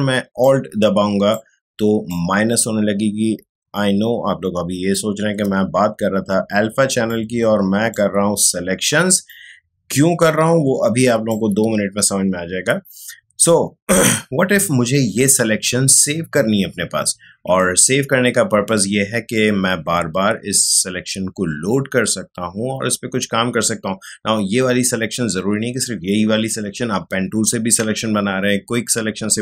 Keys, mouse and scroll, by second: 0.4-7.1 alt+drag, 7.1-13.7 alt+drag.